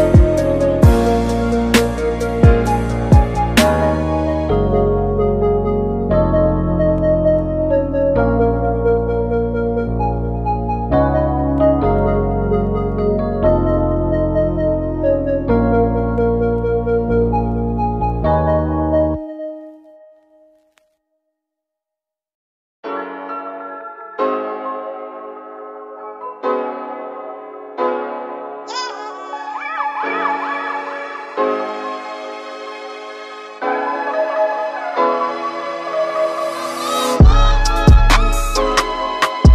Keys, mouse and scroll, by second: 3.3 scroll up 3, 3.8 shift+middle click, 4.0 z, 4.6-6.7 shift+middle drag, 6.7-11.4 drag, 12.9-14.4 drag, 18.3-24.9 drag, 31.4 click, 32.4 Tab, 33.2 click, 34.4-39.5 drag.